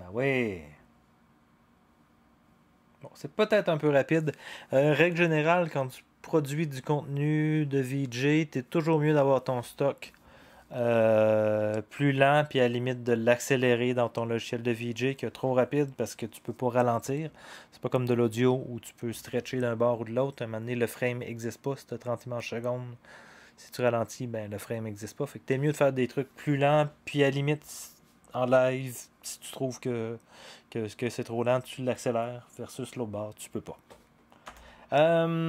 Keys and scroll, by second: 34.4 0.